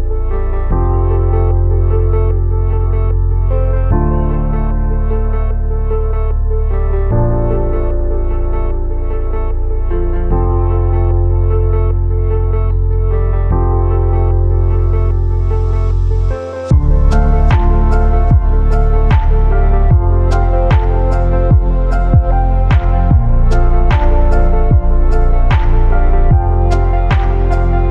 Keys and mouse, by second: 1.1 space, 4.3-7.3 drag, 9.3-9.9 shift+middle drag, 11.4-12.0 shift+middle drag, 12.3 shift+a, 19.8 click, 20.8-22.0 drag, 23.1 r, 24.1 KP_9, 24.3 KP_0, 25.8 x, 26.5 KP_Enter.